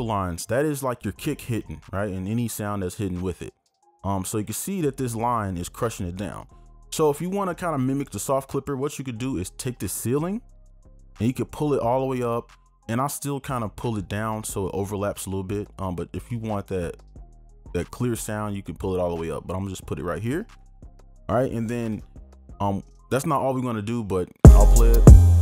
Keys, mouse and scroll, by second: 24.5 space.